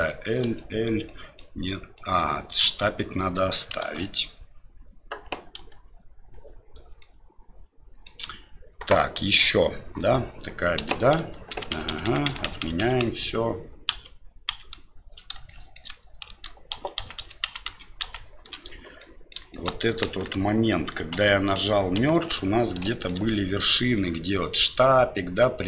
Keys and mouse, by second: 0.4 l, 1.2 middle click, 1.9 middle click, 3.8 alt+a, 7.0-8.1 middle drag, 10.8 Tab, 11.5 ctrl+z, 11.7 ctrl+z, 11.9 ctrl+z, 12.0 ctrl+z, 12.2 ctrl+z, 12.4 ctrl+z, 12.6 ctrl+z, 12.8 ctrl+z, 13.0 ctrl+z, 13.9 ctrl+z, 14.5 ctrl+z, 15.4 shift+middle click, 16.2 ctrl+z, 16.7 ctrl+z, 17.0 ctrl+z, 17.2 ctrl+z, 17.4 ctrl+z, 18.2 ctrl+z, 19.0 middle click, 19.5 middle click, 20.0 KP_1, 21.3 KP_Divide, 21.9 KP_3, 22.9 shift+middle click.